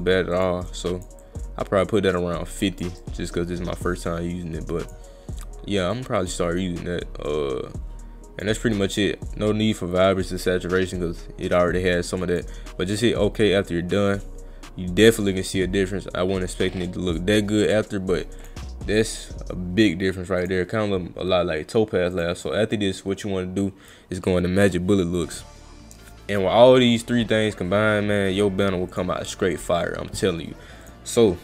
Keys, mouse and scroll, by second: 0.3 click, 0.7 click, 1.2 click, 3.0-4.9 drag, 6.0-8.4 drag, 11.5-12.4 drag, 13.0 click, 17.7 click, 18.4 click, 20.4 click, 22.2 click, 28.9 click, 30.8 click.